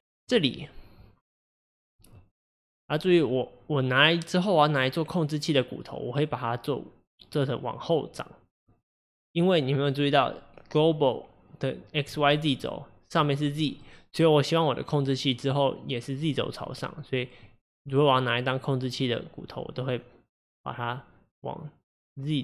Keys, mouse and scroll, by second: 8.6-11.6 middle drag, 12.2-16.9 middle drag.